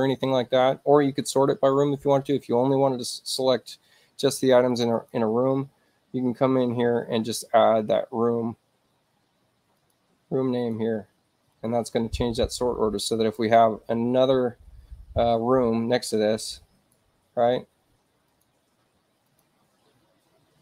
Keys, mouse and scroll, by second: 4.7 click, 4.9 click, 9.7 click, 10.6 click, 11.5 click, 13.2 click, 16.4 right click, 18.3 click, 19.2 click, 19.8 space.